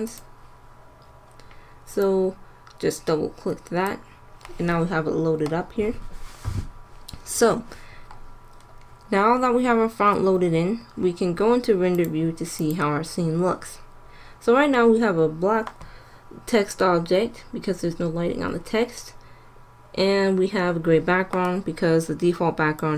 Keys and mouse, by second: 0.0-1.8 drag, 1.9-3.7 drag, 11.9 click, 12.1-14.0 drag.